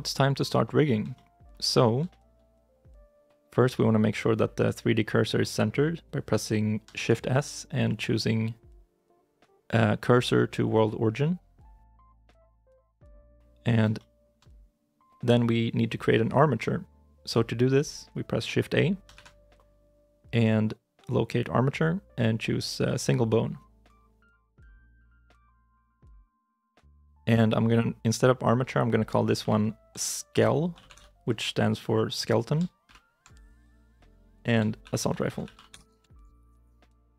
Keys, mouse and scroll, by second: 1.0 shift+middle click, 1.6 shift+middle click, 1.9 shift+i, 2.0 shift+middle click, 6.8 shift+s, 13.6 scroll up 1, 13.8 shift+middle click, 25.5 shift+z, 26.3 shift+middle click, 29.3 F2, 30.3 shift+s, 30.6 shift+k, 30.7 shift+e, 32.4 shift+l, 32.4 shift+i, 32.7 shift+-, 34.7-36.4 typing, 36.7 Return.